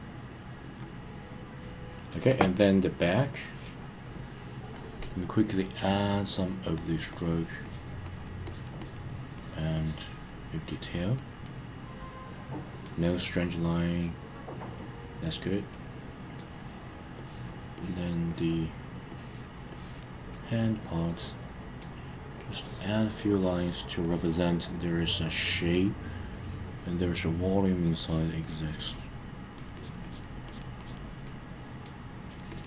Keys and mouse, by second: 3.2 middle click, 4.8 click, 6.7 click, 7.1 click, 7.6 click, 8.0 click, 8.4 click, 8.8 click, 9.4 click, 9.7 click, 10.6 click, 11.4-12.8 middle drag, 15.7 middle click, 17.2 click, 17.7 click, 18.3 click, 19.1 click, 19.7 click, 20.3-21.8 middle drag, 22.4 click, 23.3 click, 24.0 click, 25.3 click, 25.7 click, 26.3 click, 26.8 click, 28.0 click, 28.4 click, 28.8 click, 29.6 click, 29.7 click, 30.0 click, 30.5 click, 30.8 click, 31.2 middle click, 32.2 click, 32.5 click.